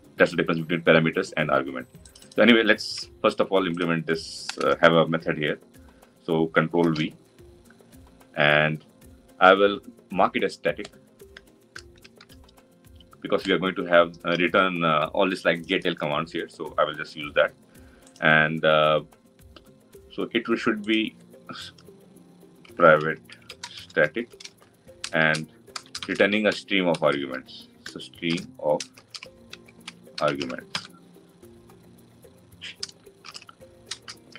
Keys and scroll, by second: 2.8 ctrl+c, 9.0 ctrl+v.